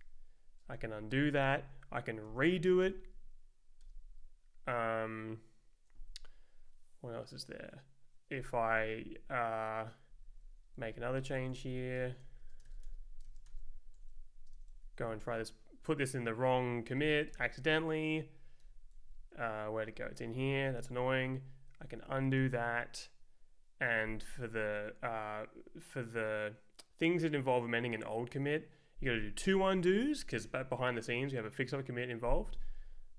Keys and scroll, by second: 0.7 z, 1.1 Return, 2.2 ctrl+z, 2.8 Return, 8.7 Right, 10.2 ctrl+s, 10.8 super+Down, 11.0 Up, 11.5 super+Right, 11.8 Down, 12.0-13.3 typing, 13.5 ctrl+t, 13.9 Left, 14.5 space, 14.7 Right, 15.0 Down, 16.9 shift+a, 17.3 Return, 18.6 Return, 18.9 Down, 20.3 Escape, 21.7 z, 22.4 Return, 29.1 z, 30.1 Return, 32.7 Left.